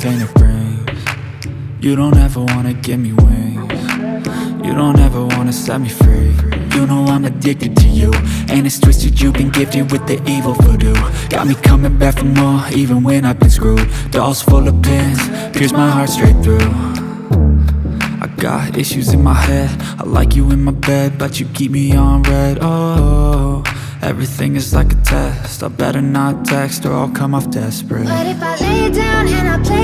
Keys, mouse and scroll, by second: 1.8 double click, 2.9 click, 8.9 click, 11.3 double click, 11.7 scroll down 1, 11.9-12.4 scroll up 1, 12.6 click, 14.1 ctrl+click, 15.1 click, 16.7 double click, 17.4 click, 19.5-19.8 scroll down 1, 19.8-20.2 scroll up 1, 20.2 click, 21.6 ctrl+o, 21.9-22.4 scroll down 1, 23.3 click, 24.9 click, 25.6 F4, 26.1 click, 27.2 ctrl+o, 27.8-28.1 scroll down 1, 28.5 scroll up 1, 29.1 click, 29.7 click.